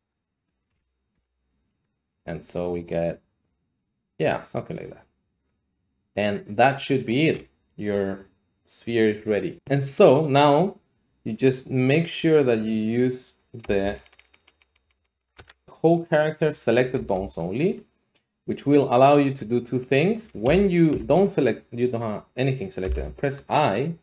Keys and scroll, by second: 0.4-1.2 typing, 13.8 Down, 13.9 Down, 14.1 Down, 14.2 Down, 14.3 Down, 14.5 Down, 14.6 Down, 14.8 Down, 14.9 Down, 15.1 Down, 15.2 Down, 15.3 w, 15.6 Down, 16.9 Return, 20.4 a, 20.9 a, 22.8 i.